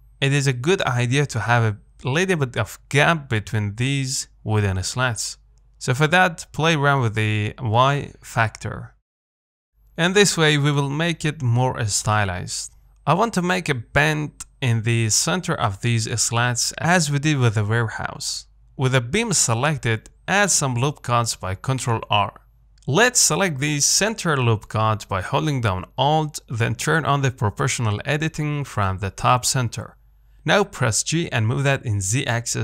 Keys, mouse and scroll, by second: 9.5-10.0 scroll up 2, 10.0-11.1 shift+middle drag, 11.1-11.4 scroll down 2, 11.4 middle click, 12.2-12.5 scroll up 2, 12.5 shift+middle click, 13.4 scroll down 1, 13.7 Tab, 13.9 middle click, 14.1-15.0 scroll up 2, 21.2 ctrl+r, 25.1-26.2 middle drag, 26.2 alt+click, 27.2 click, 28.0 g.